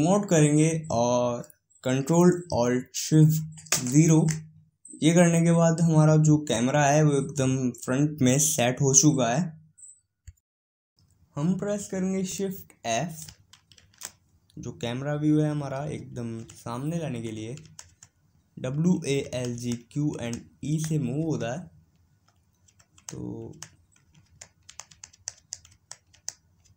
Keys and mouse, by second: 4.0 ctrl+alt+KP_0.